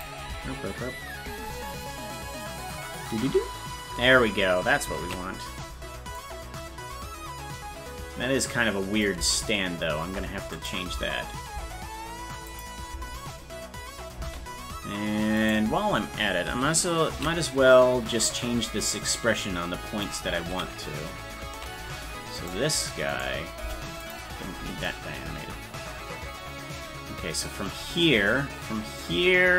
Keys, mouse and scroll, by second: 0.2 space, 5.2 ctrl+s, 6.2-9.0 drag, 9.2 space, 10.5 click, 10.9 space, 12.5 click, 12.9 space, 15.7-17.3 right drag, 17.3 ctrl+s, 18.9-20.1 drag, 20.6 ctrl+z, 22.3 right click, 23.1 right click, 23.6 Delete, 24.9-29.5 drag.